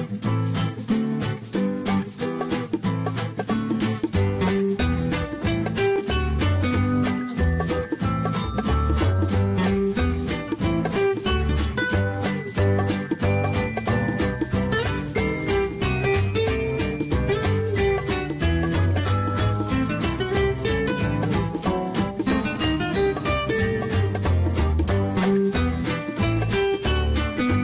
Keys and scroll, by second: 6.9 Escape, 9.9 Escape, 13.0 Escape, 15.5 Escape, 18.7 Escape, 21.5 Escape.